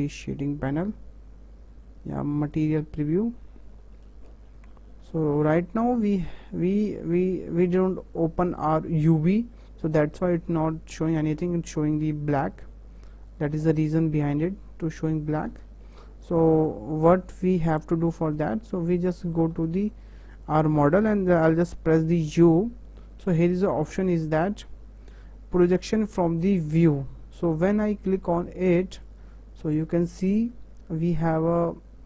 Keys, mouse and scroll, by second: 0.9-3.0 scroll up 1, 3.0 z, 3.4 scroll down 3, 3.8-6.9 shift+middle drag, 6.9-7.6 scroll up 7, 7.6 shift+middle click, 8.4-9.4 scroll up 1, 9.4 scroll down 3, 10.5 scroll up 4, 11.0 scroll down 2, 11.5 shift+middle click, 12.0 Tab, 13.1 scroll up 3, 13.6 scroll down 3, 14.4 Tab, 15.2-15.7 scroll down 3, 15.7-19.1 shift+middle drag, 19.1-19.4 scroll up 1, 19.4 shift+middle click, 19.8 scroll up 2, 20.3-29.2 shift+middle drag.